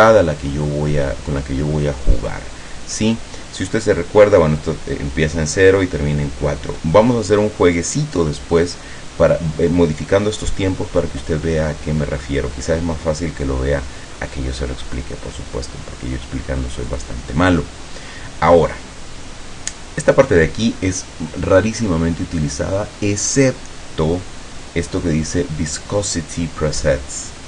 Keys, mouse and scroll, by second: 14.3-14.7 scroll down 1, 17.0 click, 17.6-18.0 scroll down 1, 18.2 scroll down 2.